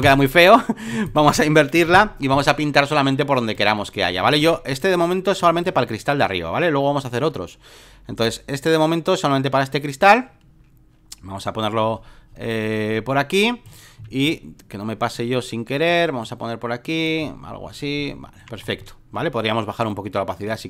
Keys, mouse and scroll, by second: 0.0-1.4 drag, 1.8 ctrl+i, 3.6 click, 4.7 right click, 5.4-14.0 drag, 14.0 x, 14.3-18.1 drag, 18.2 alt+middle click, 18.6 alt+middle click, 19.9-20.6 drag.